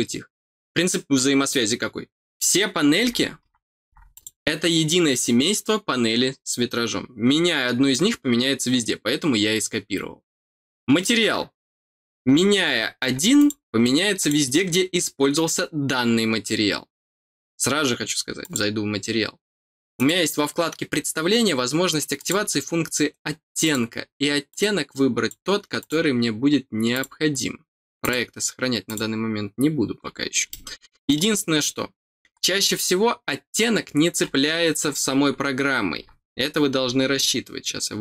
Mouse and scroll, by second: 4.1 click, 13.3 click, 14.1 click, 18.4 click, 19.9 click, 22.1 click, 23.6 click, 24.4 click, 25.7 click, 26.9 click, 28.0 click, 28.8 click, 30.4 middle click, 31.3 middle click, 32.6 scroll up 2.